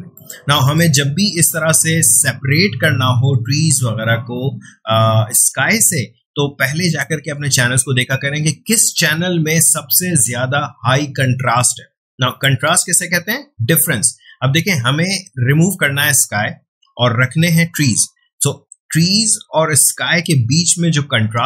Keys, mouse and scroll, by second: 6.8 click, 12.3 click.